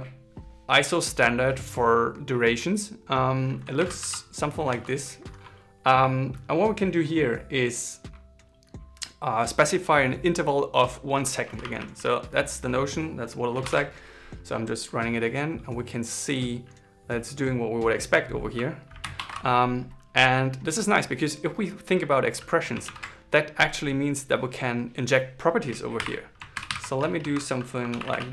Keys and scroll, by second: 13.3 ctrl+shift+r, 25.7 shift+4, 26.3 alt+8, 26.4 alt+9.